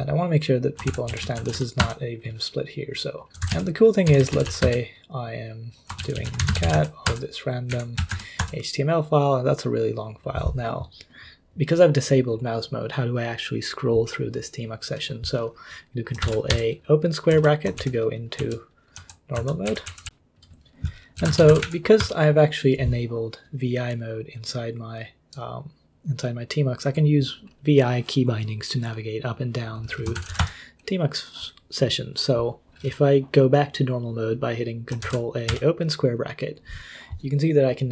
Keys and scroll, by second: 0.0-4.9 typing, 6.0-8.9 typing, 7.7 Up, 16.2 ctrl+a, 16.5 [, 17.3 k, 17.8 ctrl+u, 18.4 ctrl+j, 18.9 ctrl+l, 19.3 ctrl+h, 19.6 ctrl+u, 19.8 ctrl+u, 20.0 ctrl+u, 20.9-22.0 typing, 22.0 Return, 29.9-31.1 typing, 35.0 ctrl+a, 35.5 [.